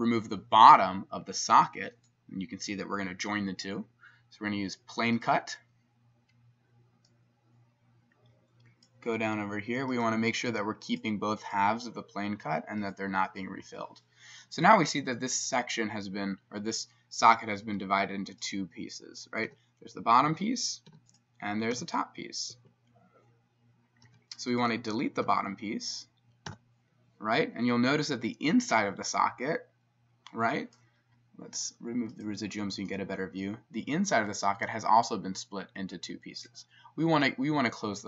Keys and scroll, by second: 17.7 s, 19.5 e, 20.3 Escape, 20.9 s, 21.8 e, 22.5 Escape, 24.1 s, 25.3 e, 26.5 x.